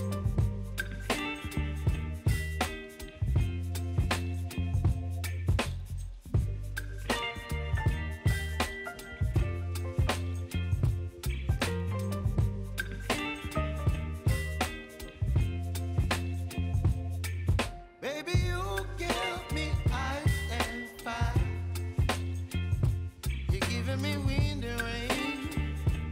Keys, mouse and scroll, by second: 0.6 click, 7.1 ctrl+v, 9.7-11.2 drag, 11.2-12.7 drag, 12.7 ctrl+0, 14.7 click, 15.9-20.5 drag, 20.5-26.1 drag.